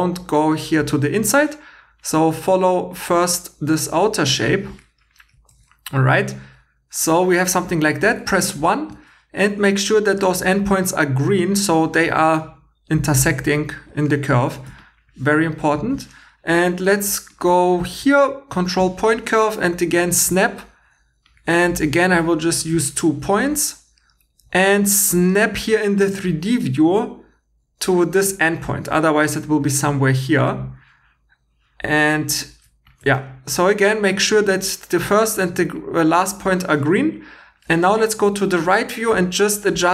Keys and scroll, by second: 5.5 2, 8.0 1, 12.1 2, 13.0 1.